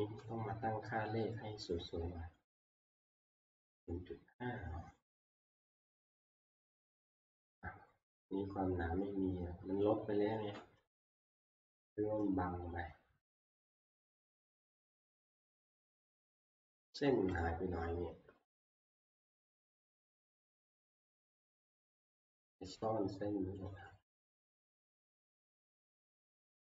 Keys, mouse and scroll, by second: 0.7 scroll, 2.4-2.8 scroll, 4.7 middle click, 5.9 scroll, 5.9 middle click, 6.8 scroll, 7.2 scroll down 3, 8.5 scroll, 11.3 click, 11.3 scroll, 12.1-12.4 scroll, 13.8-14.1 scroll, 15.1 scroll, 15.6 middle click, 17.1 alt+Tab, 19.1 middle click, 19.3 scroll, 20.0 scroll, 22.0 middle click, 23.7 click, 23.9 click, 25.0 click, 25.1 scroll, 25.2 click, 26.3-26.7 scroll.